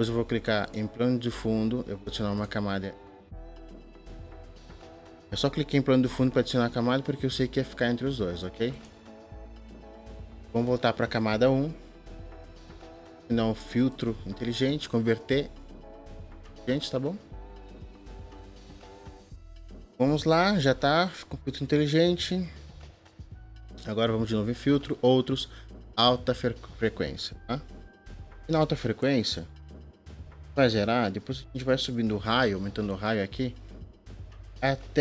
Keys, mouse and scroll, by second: 28.1 click.